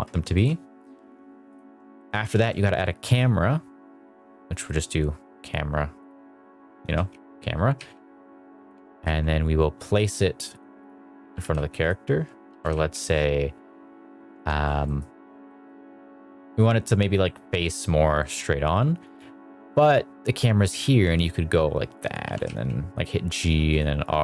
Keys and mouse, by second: 0.2 shift+middle click, 1.4 click, 1.9 shift+middle drag, 2.2 shift+a, 6.7-8.9 typing, 8.4 click, 10.7-12.6 typing, 11.7 click, 14.2 Escape, 14.7 middle drag, 15.4 middle drag, 16.7 middle drag, 18.1 middle drag, 18.9 KP_0, 20.7 g, 21.8 click, 22.1 r, 22.3 z, 23.6 click, 24.1 middle drag.